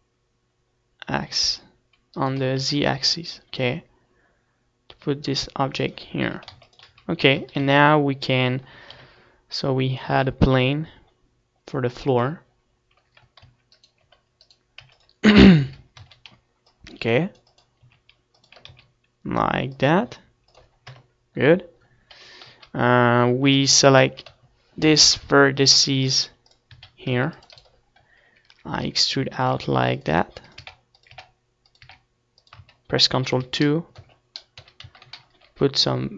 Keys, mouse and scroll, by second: 0.6-2.4 right drag, 0.7 r, 4.2-5.8 drag, 4.5 z, 4.8 ctrl+s, 5.2 z, 5.6 a, 5.8 ctrl+s, 7.1 KP_7, 8.4 shift+a, 11.7-14.2 typing, 12.0-14.5 right drag, 14.5-15.7 middle drag, 16.0 s, 16.7-20.6 drag, 16.9 s, 18.2 s, 19.1 KP_0, 20.4 KP_1, 20.7 KP_3, 21.7 KP_1, 22.2 Tab, 22.2 z, 22.4-24.1 middle drag, 24.1-26.0 drag, 24.9 a, 25.3 c, 25.7 middle click, 25.7 right click, 26.8-30.0 typing, 27.6-31.8 drag, 30.8 Tab, 31.6 ctrl+2, 32.2 Tab, 32.6 middle click, 32.7 z, 33.0 a, 33.4 ctrl+r, 34.7-36.1 drag, 35.4 s.